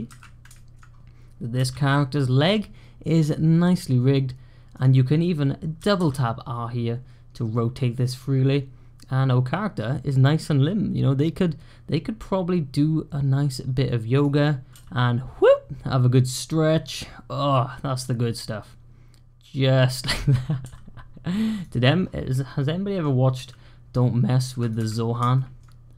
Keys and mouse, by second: 0.0-1.4 typing, 0.5 shift+click, 5.7 r, 14.6 g, 20.5 r, 22.5 click, 23.2 g, 24.6 `, 25.2 shift+click.